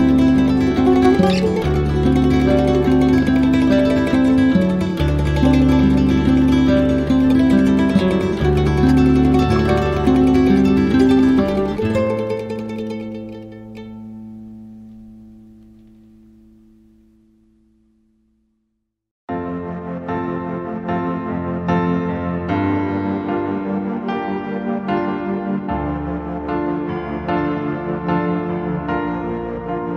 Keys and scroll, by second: 23.1 ctrl+z, 27.0 z.